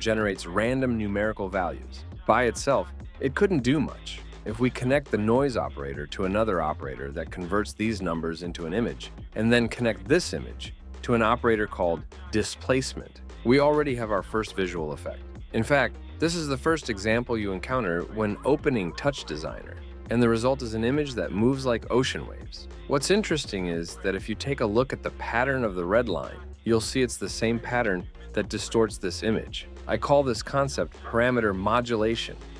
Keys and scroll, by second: 0.0-0.8 typing, 2.1 Return, 8.9-9.8 typing, 14.2 Tab, 14.5 KP_0, 14.8 KP_1, 18.8-20.3 typing, 20.6 Return.